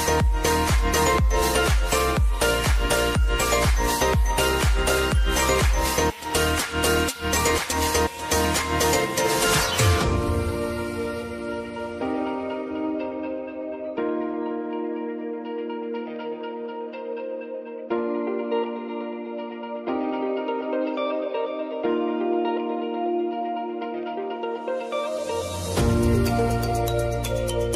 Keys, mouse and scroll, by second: 1.4-4.5 drag, 8.9 Return, 9.6 click, 10.6 F9, 11.4-15.6 drag, 15.6-18.1 drag, 18.1 click, 18.9 space, 20.5 click, 22.9 space, 24.6-27.7 drag.